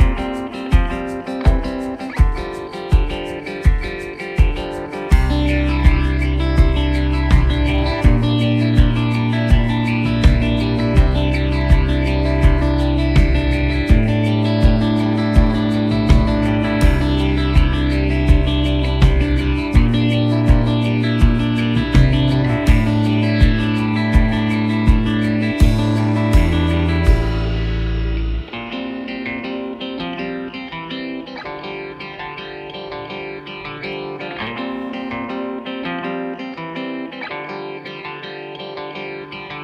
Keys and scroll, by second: 0.2-3.2 typing, 4.4 s, 5.3 g, 14.8 g, 15.0 z, 15.8 s, 17.4 shift+d, 18.8 shift+d, 19.5 shift+d, 20.1 shift+d, 20.7 shift+d, 23.5 g, 23.6 z, 24.3 shift+d, 26.1 shift+d, 26.6 shift+d, 27.2 shift+d, 30.1 s, 32.2-35.8 typing.